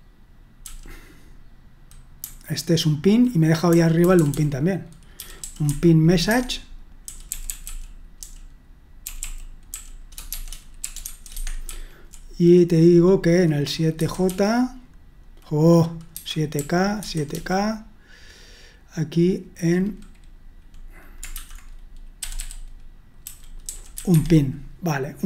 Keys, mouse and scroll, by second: 0.0-0.6 typing, 2.2-2.9 typing, 4.0 typing, 5.1-5.6 typing, 6.3 Escape, 6.8-11.7 typing, 14.0-14.7 typing, 16.3-17.3 typing, 22.2-24.4 typing.